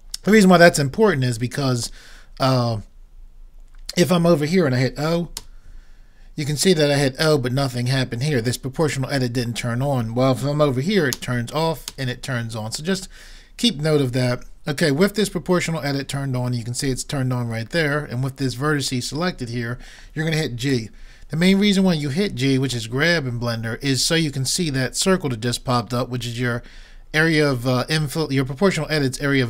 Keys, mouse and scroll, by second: 5.4 o, 11.2 o, 11.9 o, 20.7 g.